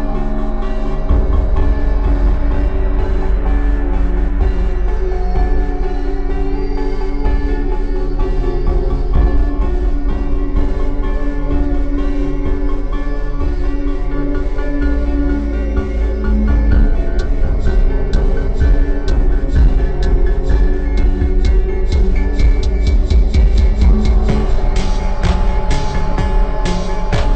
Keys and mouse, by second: 2.1-4.6 middle drag, 4.6 e, 6.3 e, 8.4-10.5 middle drag, 9.1 e, 12.8 e, 14.5 e, 16.3 e, 17.4-21.8 drag, 21.8 e, 24.3 e, 25.8-27.1 drag, 26.6 e.